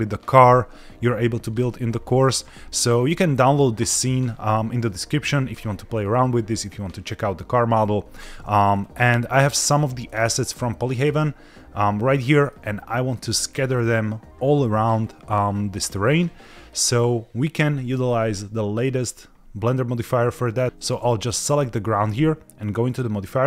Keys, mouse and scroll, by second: 8.5-8.9 scroll down 4, 9.7 scroll down 1, 10.0 middle click, 10.5-10.9 shift+middle drag, 12.4-13.1 shift+middle drag, 14.8-15.5 scroll up 2, 20.6 click, 21.3 click, 22.8 click.